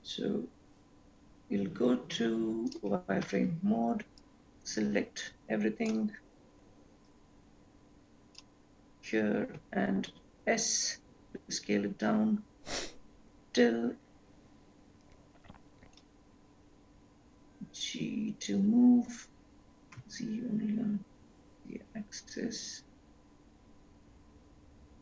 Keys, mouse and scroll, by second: 0.7-3.4 scroll up 2, 3.4 click, 4.5 click, 7.2 click, 17.3 g.